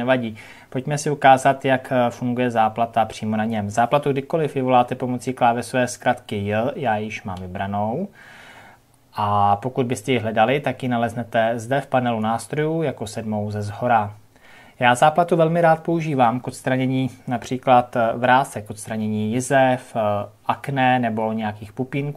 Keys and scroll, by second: 5.8 j.